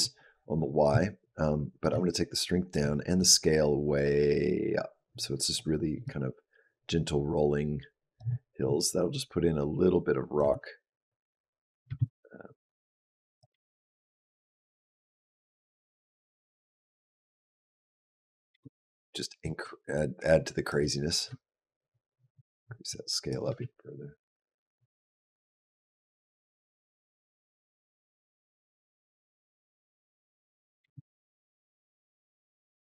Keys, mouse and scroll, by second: 1.6 click, 3.0 click, 5.9 shift+click, 8.9 click, 10.2 space, 11.7 space, 12.5 click, 13.3 space, 18.3 space, 19.4 click, 21.1 click, 23.3 space, 30.6 space, 31.6 click.